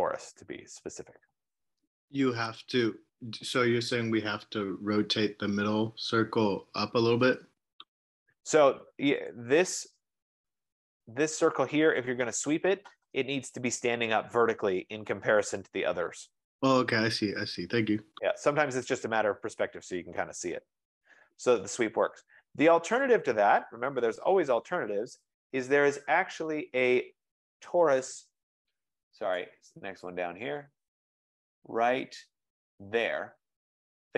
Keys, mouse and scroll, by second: 2.2 click, 7.6 F15, 9.4 click, 9.9-11.0 typing, 12.0 Delete, 12.1 click, 15.4-16.5 drag, 16.7 click, 17.5-21.0 right drag, 21.7 right click, 23.1-26.9 right drag, 29.5-32.6 drag.